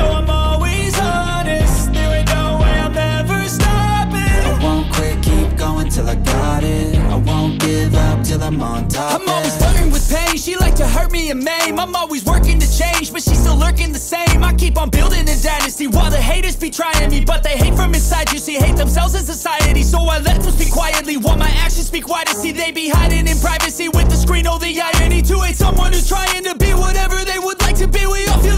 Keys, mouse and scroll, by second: 12.7 double click, 14.9 alt+click, 15.5 alt+click, 16.0 ctrl+space, 19.2 ctrl+click, 20.0 space, 21.2 alt+click, 24.1 double click, 27.2 double click, 28.3-28.5 typing.